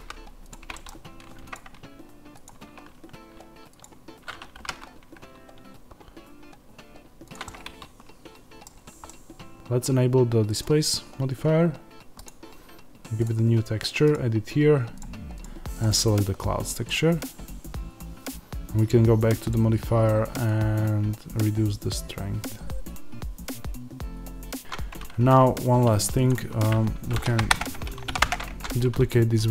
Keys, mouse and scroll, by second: 0.4 click, 0.7 middle click, 1.4 alt+click, 4.6 g, 7.2 click, 7.4-10.5 middle drag, 8.6-9.0 scroll down 1, 9.5 Tab, 10.5-24.6 drag, 24.6 Tab, 24.6 middle click, 25.5 alt+click, 27.1 shift+d, 28.2 p, 28.5 Tab.